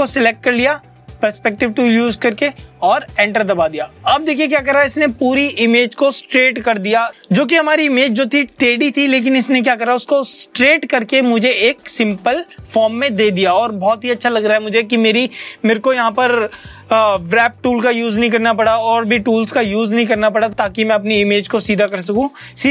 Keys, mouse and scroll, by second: 3.1 Return.